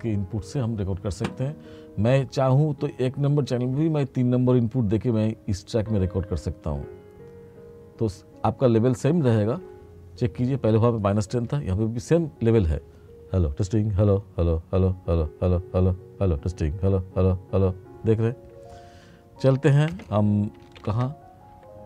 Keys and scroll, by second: 20.9 ctrl+=.